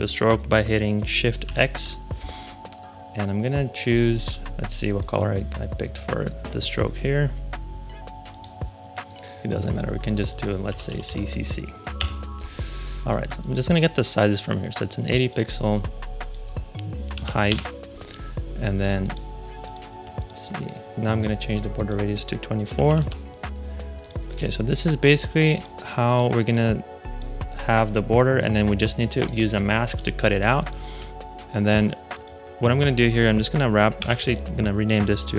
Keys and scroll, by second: 1.4 shift+x, 10.6 c, 11.9 Return, 16.8-17.6 typing, 22.4-23.3 typing, 33.9 super+r, 35.1-35.3 typing.